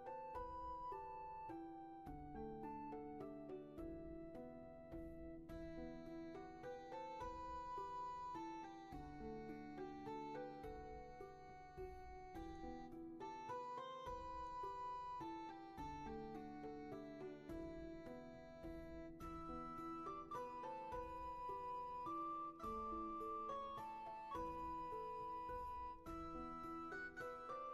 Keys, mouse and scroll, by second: 3.4 scroll down 1, 3.8 ctrl+z, 4.5-5.2 scroll down 1, 5.7 scroll up 1, 6.2 ctrl+z, 11.2 ctrl+z, 11.9 ctrl+shift+z, 16.3 ctrl+z, 18.4 scroll down 1, 21.3-22.0 scroll down 1, 22.0 space, 23.5 scroll down 1, 24.0 space, 25.0-25.3 scroll down 1, 25.3 space.